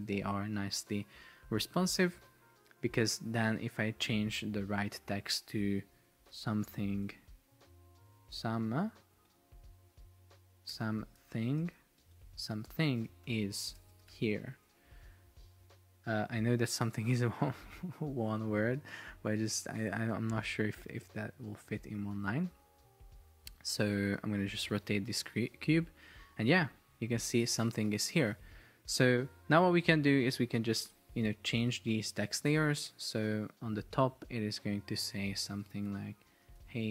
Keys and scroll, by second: 6.0-7.7 typing, 8.2 Delete, 9.4 shift+Return, 10.8-15.0 typing, 25.1 shift+Down, 28.2 shift+Up, 28.5 shift+Down, 28.9 shift+Up, 29.7 shift+Down, 36.3-36.9 typing.